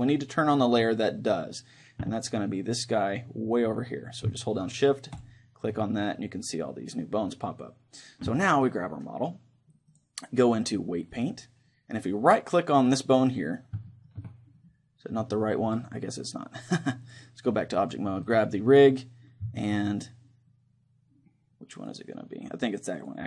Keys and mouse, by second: 5.2-6.9 drag, 6.2-7.8 middle drag, 8.7-9.9 right drag, 11.3 click, 13.2-14.8 right drag, 14.8-16.7 middle drag, 17.8 click, 18.3 middle click, 19.0 right click, 19.8-20.9 middle drag, 20.9 click, 21.8-23.2 drag.